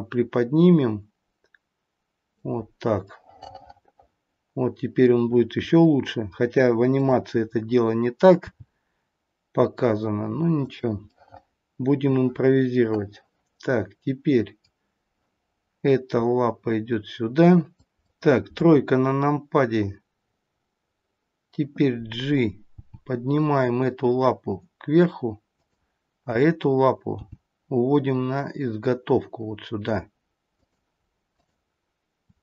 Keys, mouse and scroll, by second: 3.1 middle click, 5.7 middle click, 6.9 click, 8.4 g, 11.0 middle click, 17.7 click, 19.0 KP_3, 22.7 g, 26.2 click, 27.4 g, 31.3 click.